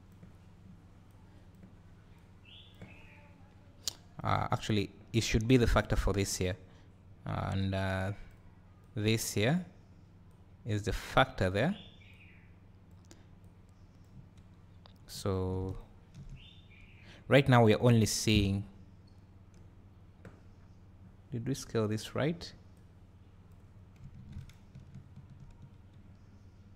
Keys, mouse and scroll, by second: 8.8 click, 11.6-13.5 drag, 15.3 click, 15.8-16.6 ctrl+shift+drag, 17.9 `, 22.8 click, 24.5 ctrl+shift+click.